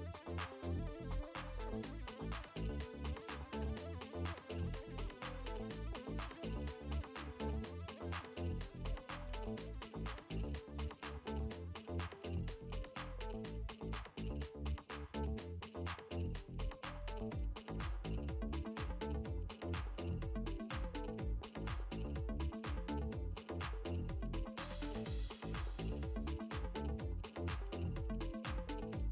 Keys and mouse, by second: 0.8 click, 2.2 space, 2.4 click, 3.7 click, 8.6 click, 13.1 click, 16.3 click, 20.8 click, 24.8 click, 27.4 click.